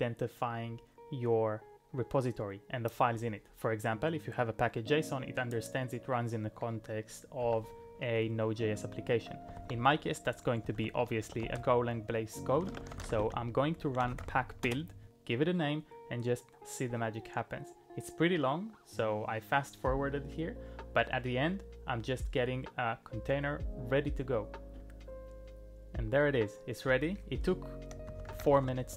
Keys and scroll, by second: 7.1 typing, 7.4 super+m, 9.6 super+i, 10.7 alt+i, 11.1-15.2 typing, 27.8-28.9 typing.